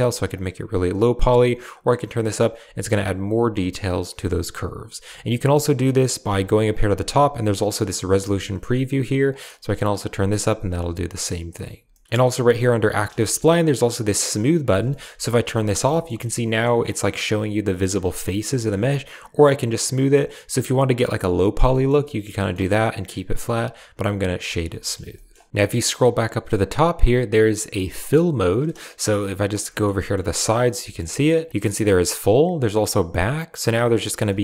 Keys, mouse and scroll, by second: 0.2-2.4 shift+drag, 3.6 right click, 5.0-6.1 shift+drag, 8.2 shift+click, 9.4-10.6 shift+drag, 11.8 shift+click, 13.1 shift+click, 14.4 click, 14.8 shift+middle drag, 15.1-15.4 middle drag, 15.8 shift+middle drag, 16.1-16.5 drag, 17.8-18.1 drag, 18.4 shift+drag, 19.5 click, 19.7 click, 20.2-21.5 middle drag, 21.6 shift+middle click, 22.3 shift+middle click, 23.6 middle click, 24.7 shift+click, 25.2 shift+click, 28.9-29.4 drag, 29.6 shift+drag, 29.9 drag, 30.7 shift+click, 31.8-32.7 drag, 33.9 middle click, 34.2 shift+click.